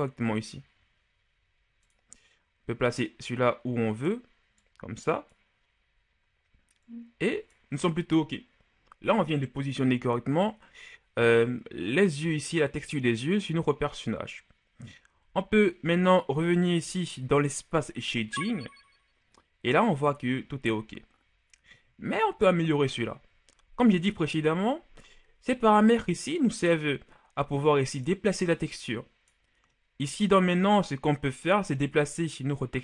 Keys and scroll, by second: 15.2 Tab, 22.9 KP_1.